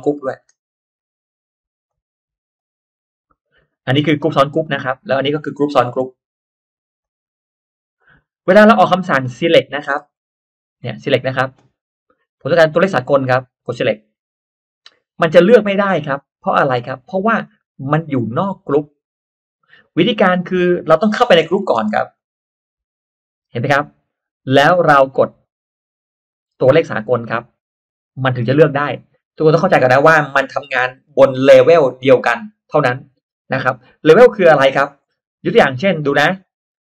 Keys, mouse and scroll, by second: 0.6-1.0 scroll up 1, 1.6 right click, 2.5 click, 3.5-3.8 drag, 4.0 click, 4.6-5.0 middle drag, 5.1 click, 6.7 right click, 7.9 click, 8.3-8.6 drag, 8.6 middle click, 8.7 scroll down 1, 9.0-9.6 scroll up 2, 9.4 middle click, 9.6-10.1 scroll down 1, 10.1-10.4 scroll up 1, 10.8 scroll up 1, 10.8 middle click, 14.0 click, 15.1 click, 15.9 click, 16.4 click, 17.4 click, 19.9-20.2 scroll down 1, 20.9-21.2 scroll up 1, 21.0 middle click, 21.8 space, 22.1 click, 23.6-24.4 scroll up 2, 26.1 click, 34.5 click, 34.8-35.2 scroll down 1, 35.5-35.8 scroll up 1, 36.4 click.